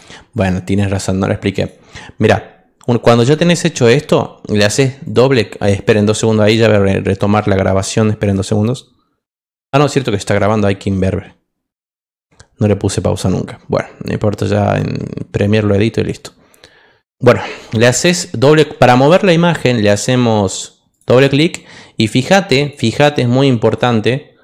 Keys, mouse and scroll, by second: 0.3 click, 1.5 click, 5.0 click, 5.8 click, 8.2 click, 10.3 click, 20.9 click, 21.0 click.